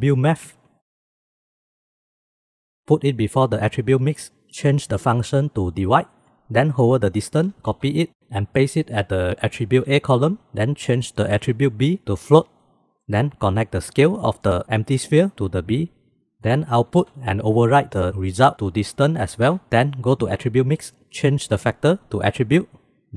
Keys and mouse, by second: 3.4-6.3 drag, 7.8 ctrl+c, 9.9 ctrl+v, 11.5-12.4 drag, 12.4-13.0 middle drag, 13.9-16.2 middle drag, 16.9 ctrl+c, 19.1 ctrl+v, 19.5 click.